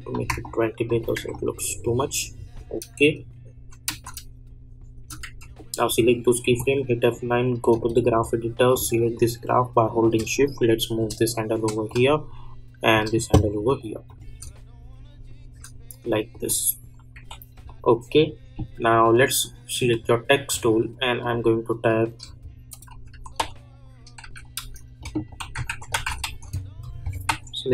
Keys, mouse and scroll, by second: 3.5 j, 4.0 space, 5.2 j, 5.5 click, 6.8 F9, 7.6 click, 7.8 =, 8.1 =, 8.7-14.0 drag, 14.4 space, 16.3 click, 17.1 k, 17.6 click, 23.1-26.7 typing, 27.2 ctrl+a.